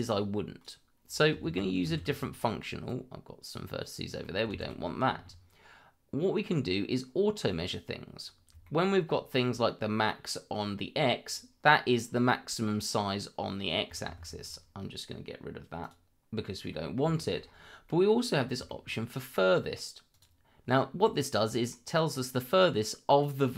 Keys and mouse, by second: 0.0-0.6 drag, 2.4 middle click, 2.9 click, 4.2 middle drag, 7.5 z, 8.6 shift+middle click, 11.3 click, 12.3-13.7 middle drag, 14.0 ctrl+z, 15.3 click, 16.3 click, 17.1 middle drag, 17.4 shift+middle drag, 17.8 middle click, 18.6 shift+middle click, 20.1 click, 21.0 middle click, 22.8 middle click.